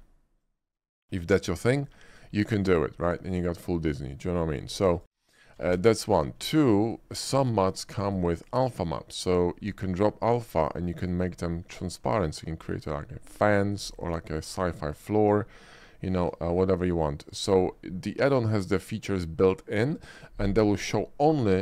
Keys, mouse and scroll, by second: 0.5 drag, 1.3 click, 2.2 click, 2.7-3.1 drag, 4.1 middle click, 4.8 click, 5.0 x, 5.0 click, 5.7 shift+a, 6.9 shift+click, 7.7 shift+middle click, 8.2 shift+click, 9.4 shift+click, 10.0 shift+middle click, 10.9 shift+click, 11.6-12.9 shift+middle drag, 14.4-15.0 middle drag, 15.2 shift+middle drag, 15.6-17.5 shift+middle drag.